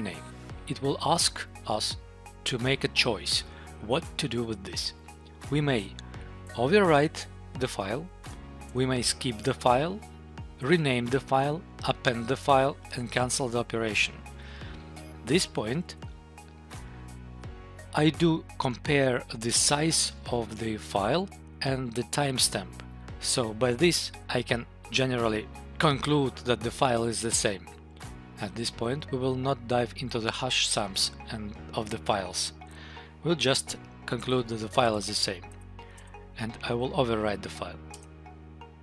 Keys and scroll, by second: 6.4 Tab, 8.7 Tab, 10.5 Tab, 15.8 Tab, 34.1 Tab, 34.7 Tab, 35.6 Tab, 37.8 Return.